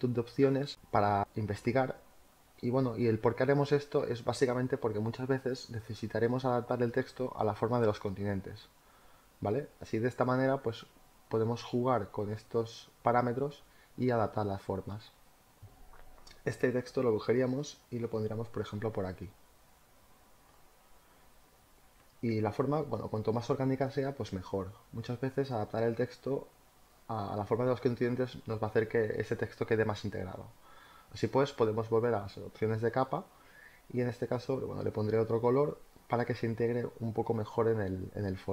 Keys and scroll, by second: 17.8 ctrl+t, 26.7 Return.